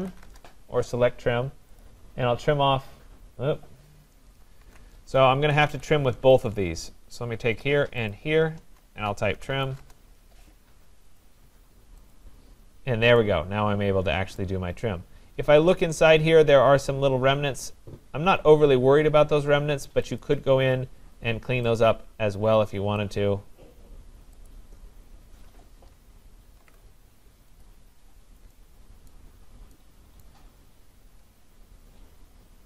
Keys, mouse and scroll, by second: 0.0-0.6 typing, 1.8 click, 1.8 typing, 4.6 ctrl+z, 5.4 Escape, 5.7 Escape, 6.4 click, 8.1 shift+click, 9.1-10.1 typing, 11.2 Return, 11.2 click, 12.1 click, 12.7 shift+click, 14.4 right click, 14.8 typing, 15.0 middle click, 15.1-17.0 scroll, 17.0 scroll, 20.2 click, 21.8 click, 23.1 click, 24.5 click, 26.6 ctrl+z, 27.6 click, 29.1 right click, 29.3 scroll, 30.3 right click, 30.8-31.2 scroll, 31.5-32.6 scroll.